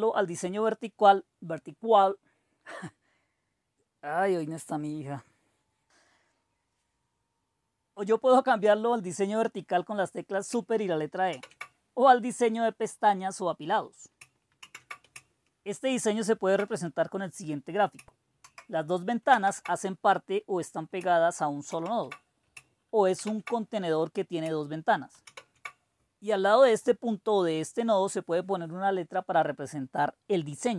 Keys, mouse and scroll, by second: 11.2 super+e, 14.5 super+w, 18.3 super+Right, 19.2 super+Left, 21.6 super+s, 23.3 super+e, 25.2 super+e.